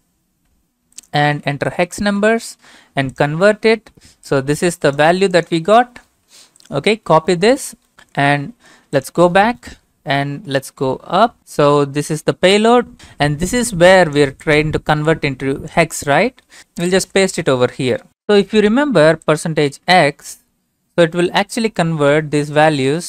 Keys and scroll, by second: 1.7 ctrl+v, 8.4 alt+Tab, 10.4 Up, 10.8 Up, 11.4 Up, 12.7 shift+Tab, 17.0 ctrl+v, 18.1 alt+Tab, 21.5 ctrl+v, 22.0 Return.